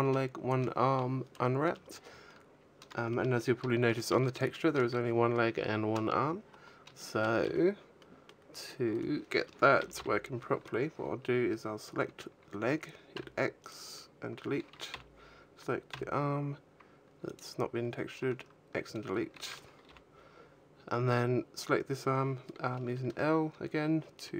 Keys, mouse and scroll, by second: 2.0-2.9 scroll down 6, 2.9 shift+middle click, 7.0 shift+middle click, 7.8 middle click, 8.8 right click, 9.7 l, 9.9 l, 13.5 x, 14.8 l, 15.8 x, 19.7 l.